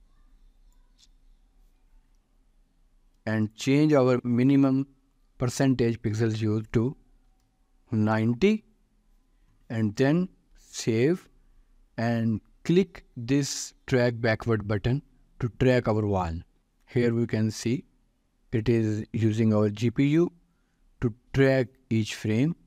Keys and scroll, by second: 4.1 ctrl+a, 7.4 0, 8.0 Return, 11.0 ctrl+s.